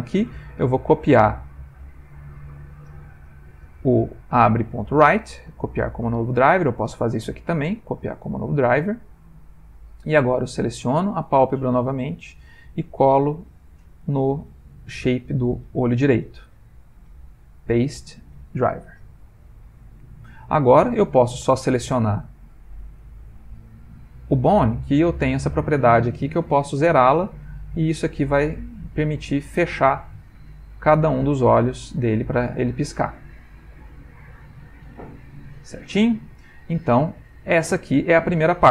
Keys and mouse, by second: 2.1 click, 2.7 click, 4.5 right click, 7.1 right click, 10.5 click, 12.1 click, 13.4 click, 14.5 click, 15.3 right click, 20.1 middle click, 21.4 click, 22.4 middle click, 25.3 click, 31.7 click, 35.4 click, 36.8 middle click.